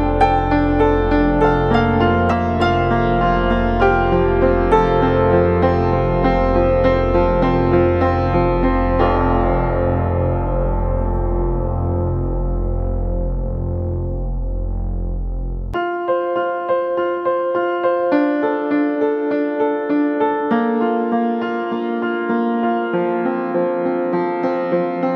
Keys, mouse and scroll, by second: 0.5 ctrl+-, 0.6 ctrl+-, 3.8-4.5 alt+scroll up 1, 18.6 double click.